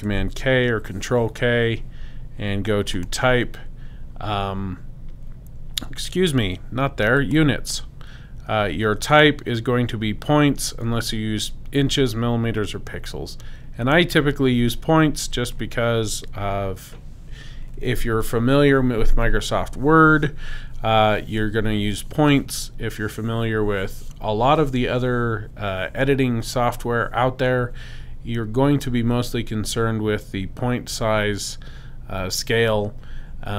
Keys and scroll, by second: 0.5 super+k.